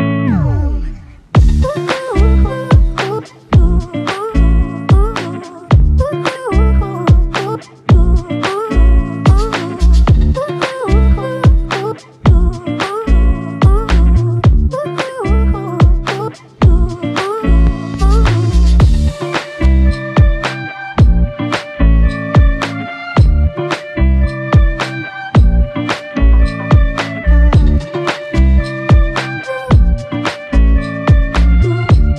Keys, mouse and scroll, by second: 2.4 double click, 3.8 alt+click, 6.5 double click, 13.4 f, 18.2 double click, 22.6 alt+click, 23.4 shift+click, 24.5 shift+click, 27.1 shift+click, 28.8 alt+click, 30.5 alt+shift+click, 31.7 alt+shift+click.